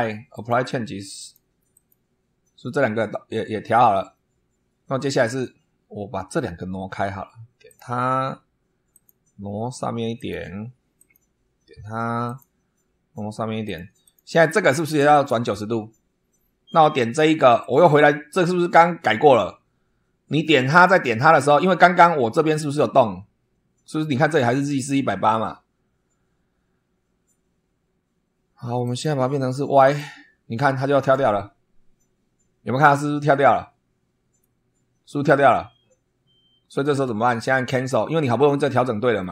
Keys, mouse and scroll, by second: 0.3 click, 1.1 click, 1.6 click, 4.5 scroll up 1, 5.0 scroll down 1, 7.6 click, 8.8 click, 10.1 click, 10.9 click, 12.2 click, 13.6 click, 14.0 click, 17.5 click, 20.4 click, 20.8 click, 28.8 click, 29.7 click, 34.3-36.8 middle drag, 37.6 click, 39.1 middle click.